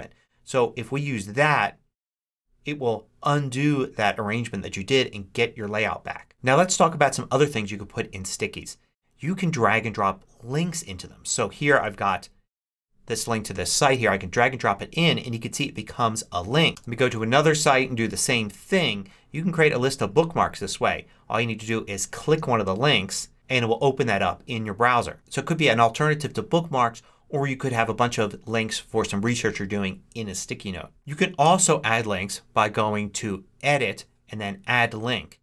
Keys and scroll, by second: 16.7 Return, 31.3 Return.